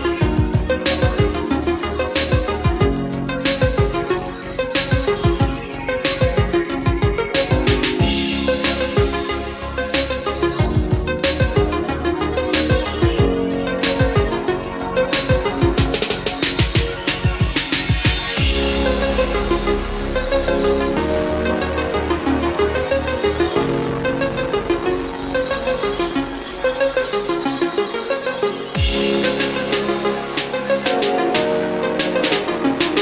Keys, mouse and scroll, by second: 1.0 scroll down 1, 2.7 click, 4.6 F4, 7.3-11.3 drag, 13.3 space, 14.4 click, 15.7 KP_3, 18.8 click, 22.0 KP_4, 24.6-27.6 drag, 27.8 Up, 28.4 Down, 29.7 click.